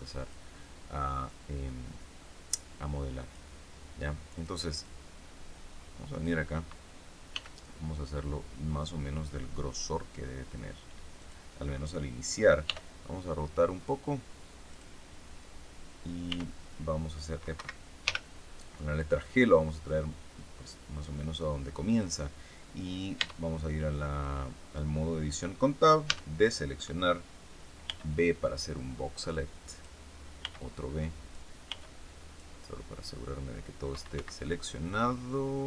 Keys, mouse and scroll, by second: 1.2-3.4 drag, 3.4 middle click, 4.3 click, 4.8-6.4 drag, 7.2 s, 11.1 click, 12.6 r, 14.6 click, 16.2 r, 17.5 Escape, 18.0 g, 21.8 click, 23.1 Tab, 26.0 a, 27.8 b, 29.2 click, 30.4 b, 30.5 click, 31.6 b, 31.7 click, 34.1 Escape, 34.4 middle click, 34.8 scroll up 1.